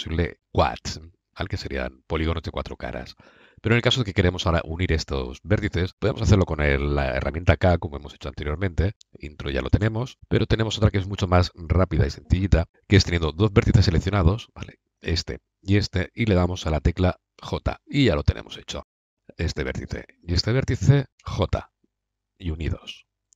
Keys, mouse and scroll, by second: 8.1 k, 10.3 Escape, 12.9 Escape, 14.4-17.2 drag, 17.2 j, 18.9 middle click, 19.0-21.3 drag, 21.1 j, 23.1-23.3 drag.